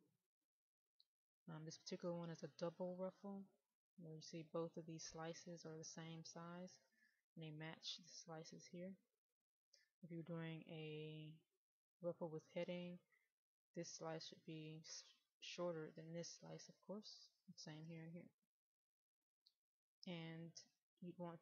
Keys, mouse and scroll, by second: 0.6-2.1 middle drag, 3.7 click, 10.0 middle click, 13.8 click, 19.0-21.3 middle drag.